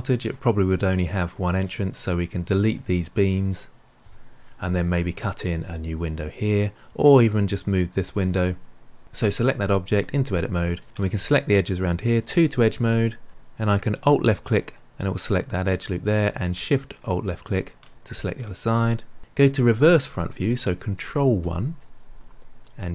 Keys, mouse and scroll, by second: 1.8 click, 2.6 shift+click, 3.1 shift+click, 3.9 Delete, 9.0 click, 10.8 alt+drag, 10.8 ctrl+z, 12.1 2, 12.9 click, 13.8 alt+click, 16.9 alt+shift+click, 21.3 ctrl+KP_1, 22.8 g.